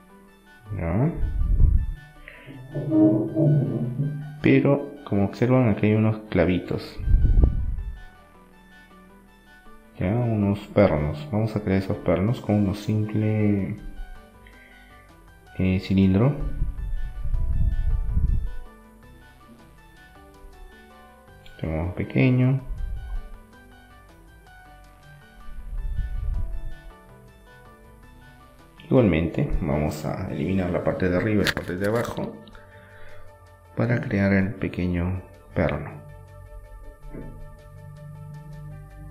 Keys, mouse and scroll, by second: 3.9 shift+a, 8.8-10.5 middle drag, 10.3 s, 12.0-13.9 drag, 13.9 middle click, 15.9 s, 21.2 middle click, 23.6 Tab, 24.6 middle click, 25.2-26.9 drag, 26.2 Delete, 29.3-30.9 drag, 30.3-32.1 right drag, 31.6 e, 32.9 s, 34.5-36.5 drag, 36.2 e, 36.8 s, 38.9-39.1 drag.